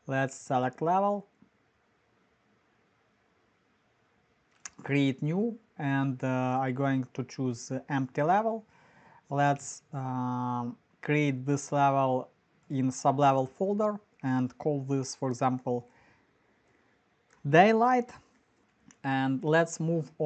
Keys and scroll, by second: 15.4-19.0 typing.